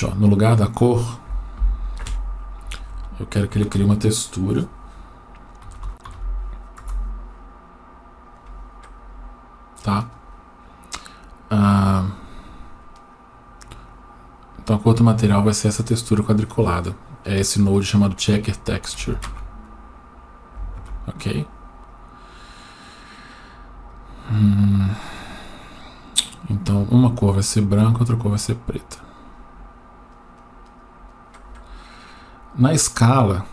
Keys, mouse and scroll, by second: 0.6 click, 2.7 Escape, 3.7 shift+a, 13.1-14.9 drag, 18.0 click, 21.9-24.1 drag, 26.5 click, 29.1 click.